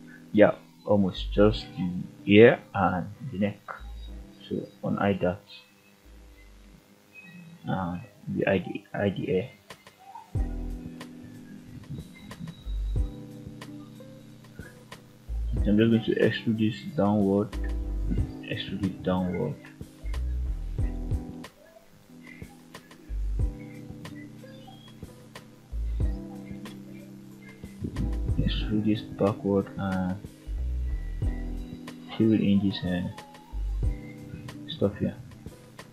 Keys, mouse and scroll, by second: 2.3-2.8 scroll down 1, 2.8 /, 4.6 alt+h, 5.0 scroll up 1, 5.4 click, 6.5-7.1 middle drag, 7.7 click, 8.2 g, 9.0 right click, 9.4 h, 10.2 click, 10.9-11.2 shift+middle drag, 11.7 Tab, 12.1 middle click, 12.9-13.2 scroll up 2, 13.6 click, 14.8 ctrl+click, 16.0 e, 17.1 click, 17.6 e, 20.7 click, 21.2-22.0 middle drag, 23.9 click, 24.8 g, 26.4 click, 27.7 e, 28.9 click, 30.2 shift+click, 31.4 f, 32.7 click, 33.3 g, 33.9 click, 34.6 shift+middle click.